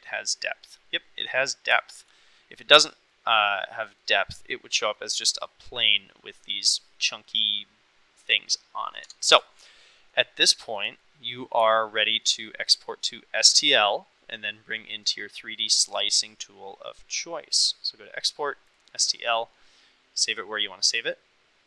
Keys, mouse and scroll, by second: 1.8 shift+middle click, 3.2 middle click, 3.9 middle click, 5.0 middle click, 9.1 Tab, 9.8-10.2 middle drag, 10.7 shift+middle drag, 11.1-11.5 middle drag, 11.9-12.3 shift+middle drag, 12.7 middle drag, 15.3-19.0 drag.